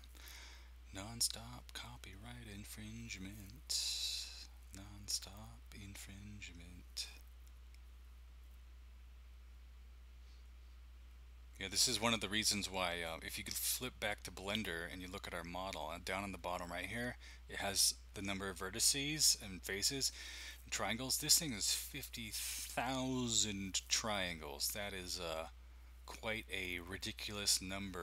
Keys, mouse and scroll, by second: 14.5 click.